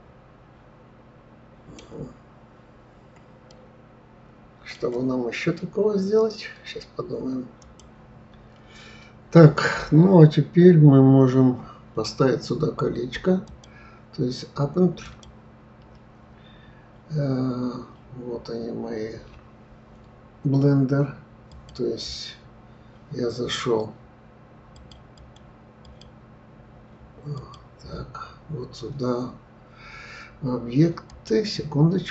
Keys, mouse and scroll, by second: 3.8-6.8 middle drag, 11.1-11.9 scroll up 2, 13.4-16.4 drag.